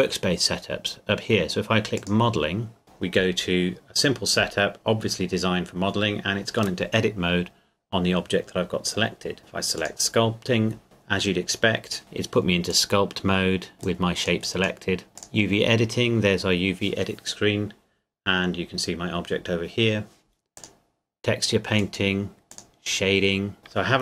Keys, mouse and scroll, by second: 2.0 click, 2.8 KP_Decimal, 4.2 middle click, 9.8 click, 10.8 KP_Decimal, 12.0 middle click, 12.7 click, 13.7 middle click, 13.8 click, 20.6 click.